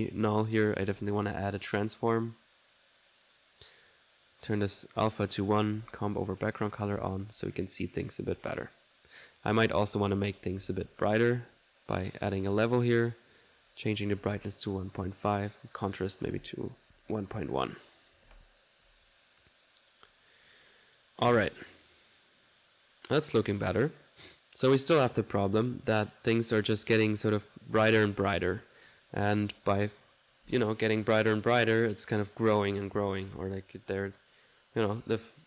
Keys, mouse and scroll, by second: 0.1 right click, 0.4 click, 0.7-1.4 typing, 2.0 click, 2.7 click, 3.0-6.6 drag, 6.6 middle click, 7.0 click, 7.2 alt+1, 8.7 middle click, 9.6 right click, 10.0 click, 10.5-12.0 typing, 11.5 click, 12.2 click, 12.7 click, 13.0 click, 13.5 click, 15.6-16.9 drag, 16.9 ctrl+z, 17.4-18.9 ctrl+drag, 18.7-19.4 typing, 21.9 1, 22.5-24.6 drag, 25.3 right click, 26.2-28.9 drag.